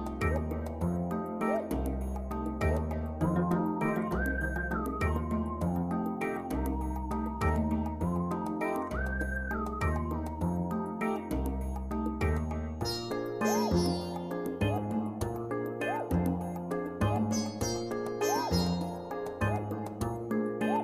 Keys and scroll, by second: 2.1 ctrl+j.